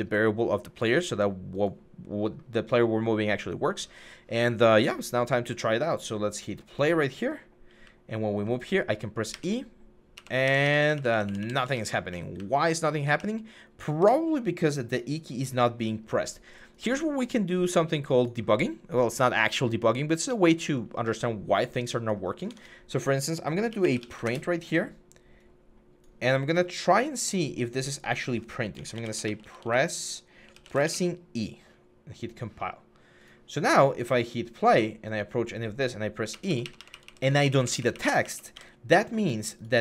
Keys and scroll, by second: 7.6-12.8 typing, 13.8 Escape, 22.3 Tab, 23.5-23.8 typing, 24.0 Return, 28.6-31.2 typing, 35.1-38.0 typing, 38.3 Escape.